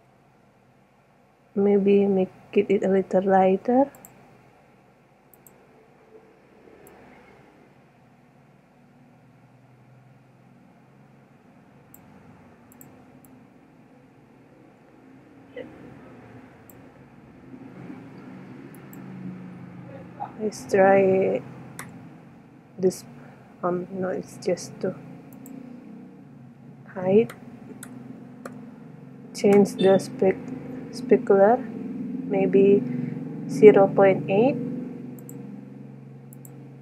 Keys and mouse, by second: 4.1 click, 5.5-7.5 drag, 8.7-9.8 drag, 12.0 middle click, 12.9-15.2 drag, 19.4 click, 25.7-27.3 drag, 30.1-31.7 middle drag, 32.2 middle click, 35.4 click, 36.0 click.